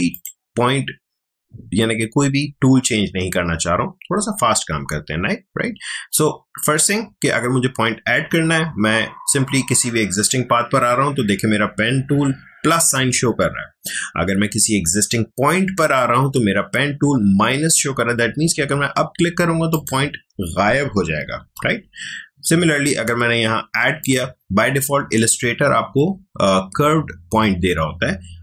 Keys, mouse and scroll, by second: 19.7 click, 21.4 ctrl+z, 24.0 click.